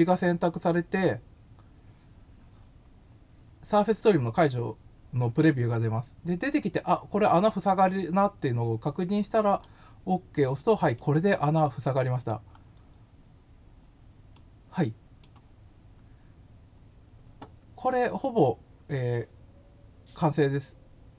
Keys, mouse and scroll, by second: 9.4 click, 10.9-12.2 middle drag, 12.5-13.4 scroll up 3, 14.3 middle click, 16.0 scroll down 1, 16.7 scroll up 1, 18.3 scroll down 1.